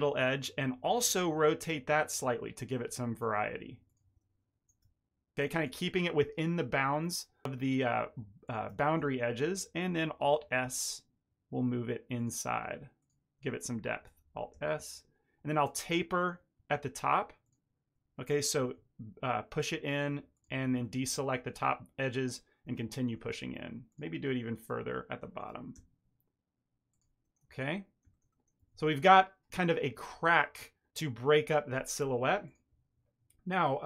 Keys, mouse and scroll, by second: 0.8 r, 3.0 click, 3.8 ctrl+click, 4.3 r, 7.4 click, 8.4 ctrl+click, 8.8 shift+middle click, 9.0 ctrl+middle click, 9.3 middle click, 10.3 alt+s, 12.9 shift+click, 14.2 alt+s, 15.9 ctrl+middle click, 17.4 shift+click, 18.4 alt+s, 20.7 ctrl+middle click, 22.0 ctrl+middle click, 22.6 middle click, 23.8 click, 24.5 ctrl+drag, 25.4 alt+s, 27.2 middle click, 27.4 Tab, 27.6 middle click, 28.1 ctrl+middle click, 28.2 middle click, 28.5 a, 28.7 a, 28.8 middle click, 32.4 click.